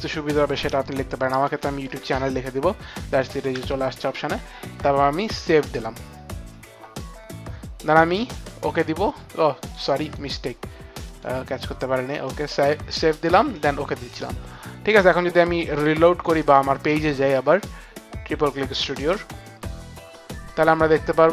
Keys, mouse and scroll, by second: 1.2-2.3 typing, 5.3 Right, 5.3 Down, 5.3 click, 5.3 u, 9.6 click, 10.0 click, 11.0 click, 12.2 click, 13.5 click.